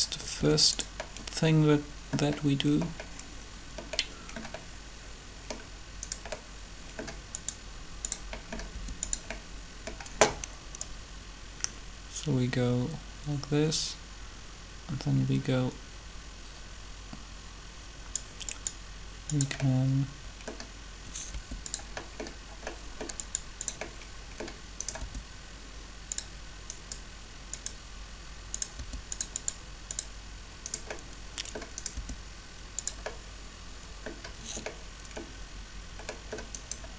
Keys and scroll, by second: 0.4 r, 8.7 r, 21.3 r, 25.0 r, 28.8 r, 31.9 r.